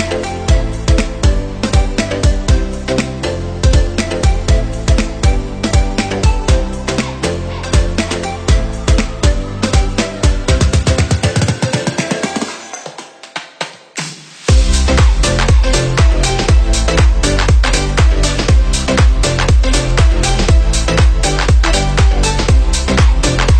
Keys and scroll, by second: 10.8 Up, 11.4 Left, 18.4 Up, 19.0 Left, 21.9 Down.